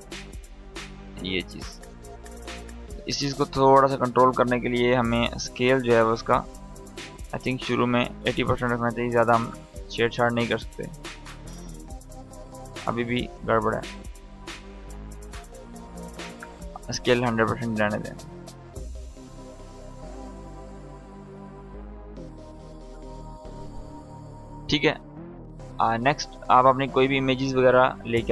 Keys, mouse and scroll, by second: 2.4 click, 10.5-12.3 drag, 17.3-20.8 drag, 20.7 space, 22.4 click, 22.8 space, 25.3 click.